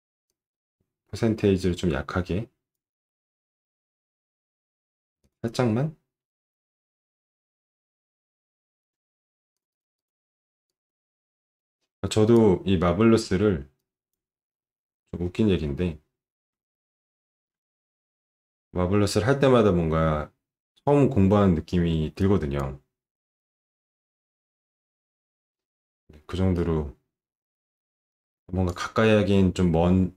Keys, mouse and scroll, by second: 0.3-2.7 drag, 9.5 click, 10.0 click, 10.7-12.3 drag, 14.0 click, 16.6 alt+middle click, 22.4 click, 26.6-28.7 drag, 29.5-29.8 scroll up 1.